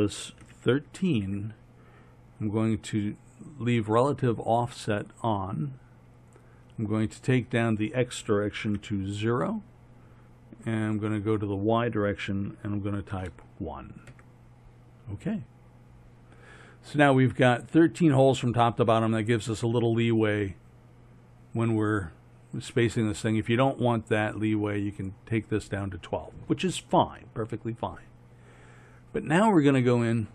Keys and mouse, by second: 6.4-11.8 drag, 11.8-23.6 middle drag, 25.7-27.0 middle drag.